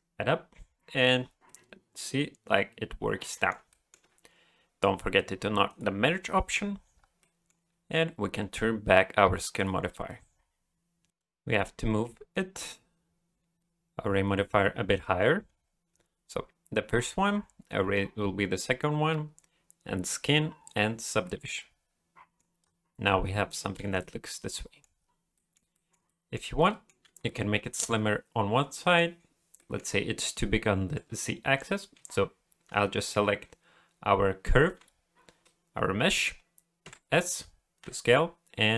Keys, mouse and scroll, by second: 1.5 middle click, 3.7 shift+middle click, 5.7 click, 6.5-7.2 scroll down 4, 7.2 middle click, 7.8-8.7 scroll up 5, 9.6 click, 9.9 scroll down 1, 10.1 middle click, 11.1 scroll up 1, 11.2 click, 15.9-17.0 scroll up 2, 17.0 scroll down 3, 18.3-19.9 scroll down 8, 19.9 scroll down 3, 21.2 middle click, 22.6-23.0 scroll down 4, 23.0 middle click, 23.7 alt+a, 24.0 middle click, 25.0 scroll up 2, 25.3 middle click, 25.7 shift+middle click, 26.1 middle click, 26.6 middle click, 27.0 a, 27.3 middle click, 28.7 middle click, 29.6 middle click, 36.8 s.